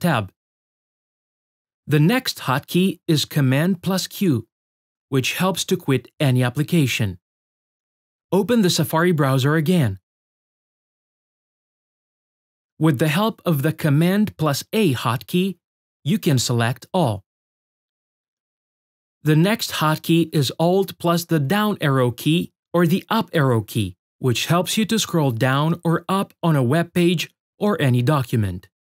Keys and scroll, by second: 2.6 super+q, 12.3 super+a, 24.1 shift+super+q.